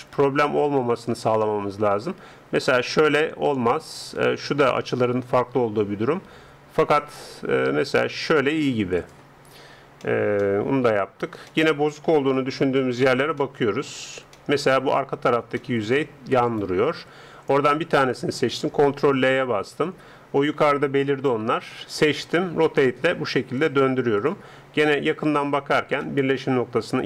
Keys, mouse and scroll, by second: 0.2 r, 9.6 middle click, 10.0-11.3 drag, 11.3-14.8 middle drag, 12.8 a, 16.5-18.4 right drag, 18.4 ctrl+l, 21.1 a, 22.4 r.